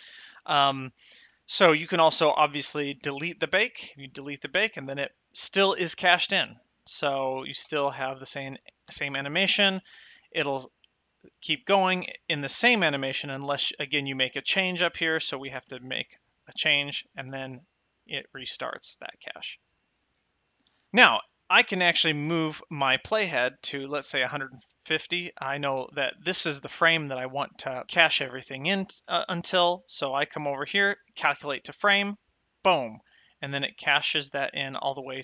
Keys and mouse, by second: 4.2 click, 7.9 space, 9.4 shift+Left, 10.0 space, 12.3 space, 14.9 shift+click, 16.0 g, 16.7 right click, 17.6 space, 20.3 space, 23.9 click, 32.3 click.